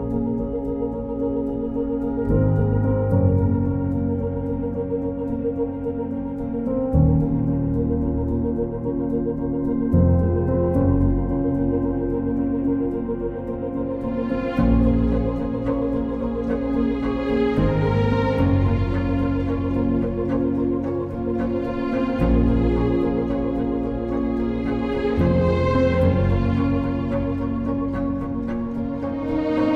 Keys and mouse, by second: 0.9 KP_3, 1.8 KP_Divide, 4.9 k, 7.7 click, 10.9 ctrl+space, 11.6 Escape, 12.5 ctrl+space, 13.6 m, 15.1 n, 16.8 k, 18.0 click, 18.6 click, 21.3 click, 22.0 click, 22.7 click, 23.2 click, 23.8 click, 25.6 click, 26.7 click, 28.3 click, 28.9 click.